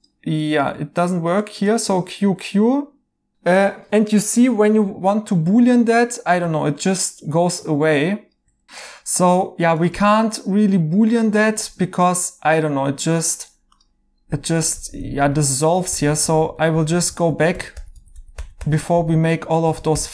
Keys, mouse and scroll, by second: 1.6 q, 1.8 q, 6.4 ctrl+z, 8.6 Escape, 8.6 q, 9.2 right click, 10.6 q, 11.5 q, 14.9 ctrl+z, 15.1 ctrl+z.